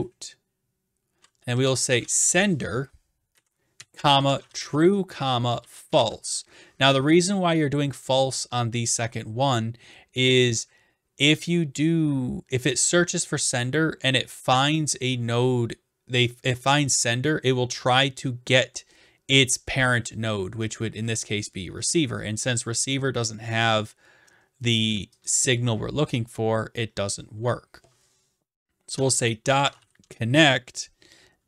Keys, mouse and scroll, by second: 1.3-6.6 typing, 3.4 Right, 25.3-26.3 drag, 28.7-30.3 typing.